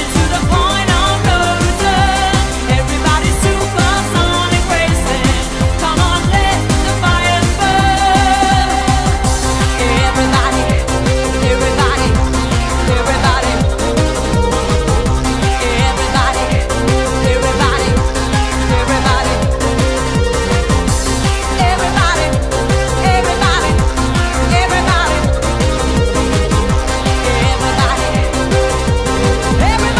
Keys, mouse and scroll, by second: 1.4 right click, 4.1 shift+d, 23.8 click, 29.7 click.